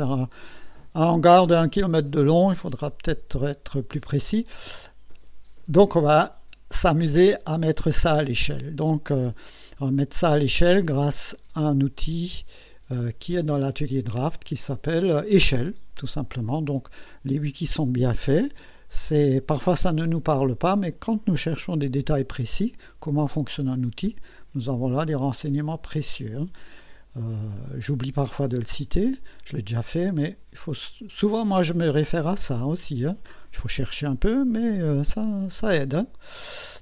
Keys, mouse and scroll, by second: 12.5 click, 26.8 middle click.